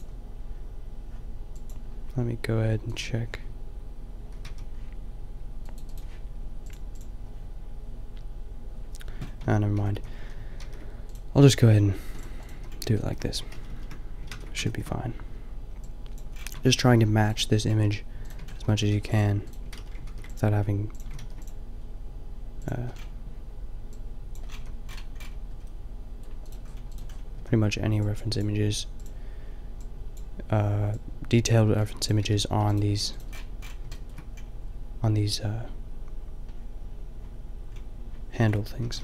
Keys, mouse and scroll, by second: 9.4 Tab, 9.7 a, 9.9 a, 10.1 a, 10.5 ctrl+r, 11.5 ctrl+r, 12.6 a, 13.5 ctrl+z, 13.9 ctrl+z, 14.6 ctrl+z, 16.6 Tab, 16.9 g, 17.8 g, 18.3 Tab, 18.6 a, 18.9 ctrl+r, 19.6 click, 19.7 ctrl+z, 20.1 ctrl+r, 21.0 a, 21.2 ctrl+r, 22.7 Tab, 24.5 a, 29.0 a, 32.2 g, 32.9 g, 33.3-34.0 middle drag, 37.7-38.9 middle drag, 38.9 Tab.